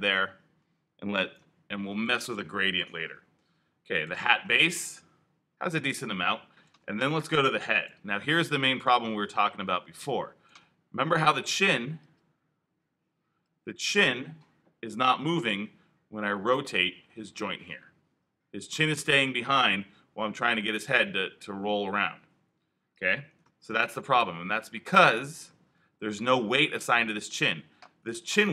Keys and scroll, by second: 23.6 super+z.